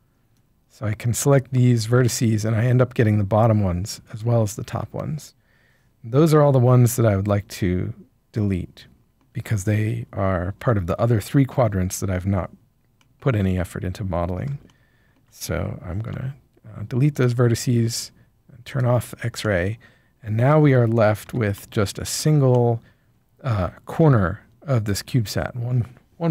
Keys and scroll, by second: 16.0 x, 21.2 Tab.